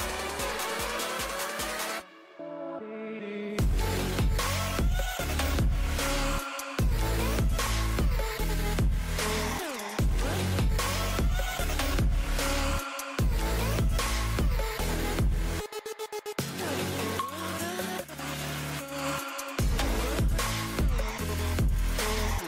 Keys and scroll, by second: 8.0 2, 13.6 super+i.